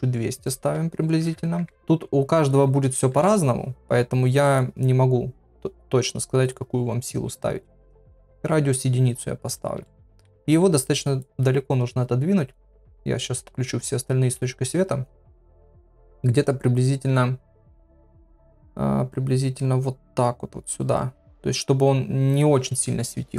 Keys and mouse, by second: 0.4-2.4 drag, 1.4 KP_0, 3.1 KP_7, 7.6-9.0 drag, 9.8 shift+middle click, 10.5 g, 12.4 click, 12.9 click, 14.4 g.